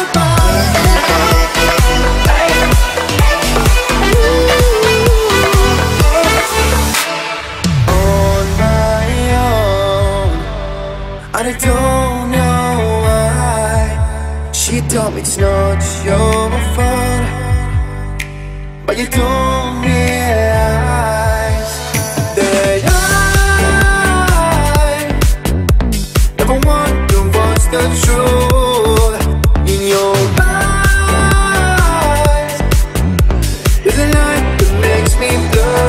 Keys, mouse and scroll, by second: 0.1 ctrl+click, 1.2 Up, 1.7 9, 2.2 shift+', 2.3 Return, 2.7 space, 5.5 click, 6.5 1, 7.6 click, 7.7 space, 8.5 t, 9.6 click, 11.1 space, 12.8-13.6 scroll up 1, 13.6 click, 15.6-16.3 scroll down 1, 17.5 t, 18.1 space, 18.7 scroll up 1, 18.8 m, 19.3 click, 19.4 click, 23.9-25.3 typing, 25.5 scroll down 1, 26.6 click, 26.9 scroll up 1, 27.0 e, 27.4 click, 27.6 space, 27.8-28.1 scroll down 1, 28.1 click, 28.6 scroll up 1, 28.9 shift+middle click, 29.3-29.9 scroll up 1, 29.9 t, 30.5 click, 31.8-35.3 typing, 34.9 Return.